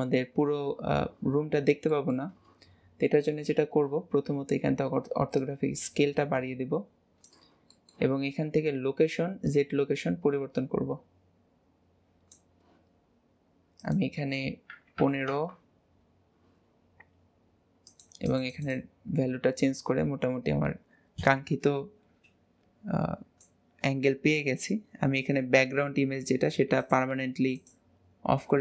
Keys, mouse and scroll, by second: 0.1-1.9 scroll up 1, 1.9-4.9 shift+middle drag, 5.3-7.7 drag, 7.7-9.4 shift+middle drag, 9.4-12.5 drag, 13.8-16.8 drag, 17.8-21.7 drag, 26.7 click, 27.5 click.